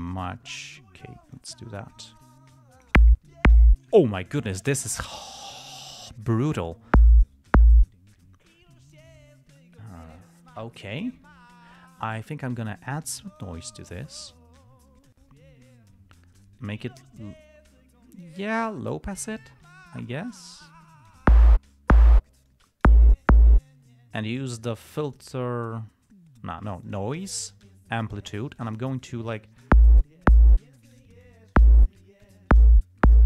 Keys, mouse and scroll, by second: 0.4-1.9 drag, 2.5-3.3 drag, 5.3 click, 13.7 click, 18.5 click, 19.6-21.6 drag, 22.8-23.3 drag, 27.2 click, 28.9 click, 29.3-30.1 drag, 31.1 click, 31.5 click, 32.5-33.1 drag.